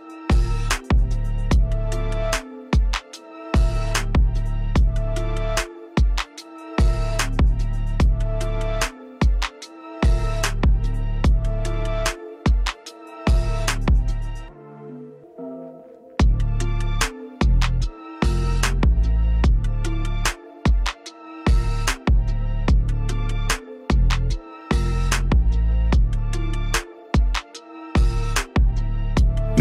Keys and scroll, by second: 5.6 p, 16.3 space, 19.4 F9, 24.3 space.